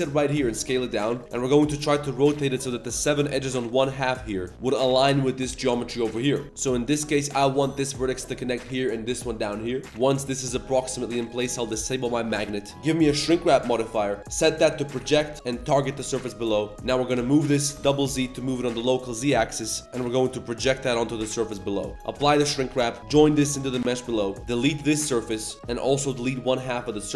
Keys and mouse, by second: 0.3 s, 1.2 Tab, 1.2 2, 1.6 g, 2.1 r, 3.3 Tab, 3.5-4.0 drag, 6.4 Tab, 9.8 Tab, 9.8 middle click, 11.2 click, 11.5-12.3 drag, 12.7-13.2 drag, 13.6 middle click, 13.8 z, 14.2-14.8 drag, 15.4 click, 16.2 shift+middle drag, 16.4 z, 16.5 middle click, 16.7 click, 17.1 g, 19.8 z, 20.9 click, 21.3 z, 21.7 click, 22.2 ctrl+a, 22.7 z, 22.9 shift+click, 23.2 ctrl+j, 23.5 Tab, 23.9 shift+click, 24.3 ctrl+shift+click, 24.4 3, 24.6 x, 25.5 drag, 25.5 1, 26.0 ctrl+click, 26.3 x.